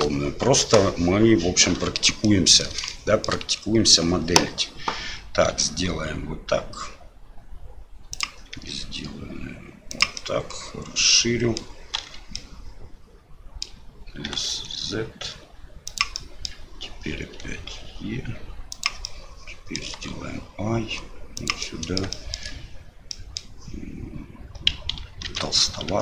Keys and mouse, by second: 1.7 l, 2.4 middle click, 3.0 shift+middle click, 10.3-11.6 middle drag, 12.0 KP_Divide, 12.3-13.7 middle drag, 14.3 s, 16.2 middle click, 19.1 middle click, 19.7 click, 21.6 click, 22.2 shift+click, 23.2 click, 25.3 ctrl+z, 25.9 i.